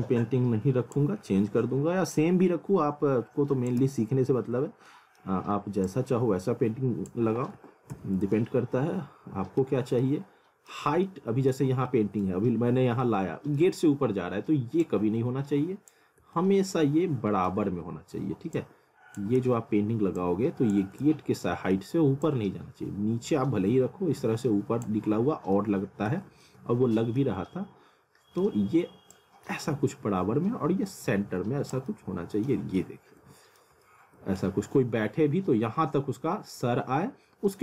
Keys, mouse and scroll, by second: 1.2-2.1 scroll up 1, 2.1 click, 3.8 z, 4.5-4.9 scroll down 1, 4.9 middle click, 5.8 click, 7.3 w, 7.9 z, 8.4 alt+middle click, 9.8 scroll down 1, 10.0 alt+middle click, 11.1 alt+middle click, 12.3 middle click, 12.7 scroll up 1, 13.1 alt+middle click, 14.8 click, 16.4 alt+middle click, 18.6 click, 19.4 ctrl+z, 20.2 click, 21.0 alt+middle click, 22.3 click, 25.1-25.5 scroll down 1, 25.6 alt+middle click, 26.5 alt+middle click, 27.4 scroll up 1, 27.5 alt+middle click, 29.2 click, 31.9 middle click, 32.7 scroll up 1, 32.8 middle click, 33.8 middle click.